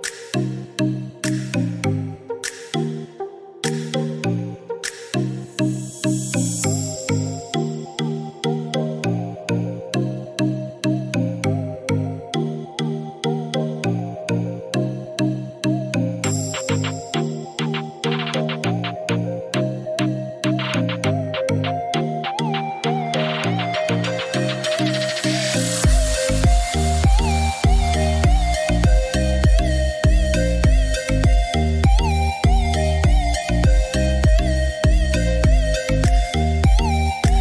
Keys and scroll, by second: 7.5 8, 7.9 0, 8.3 Return, 14.1 6, 14.5 0, 14.9 Return, 35.2 7, 35.7 0, 36.1 Return.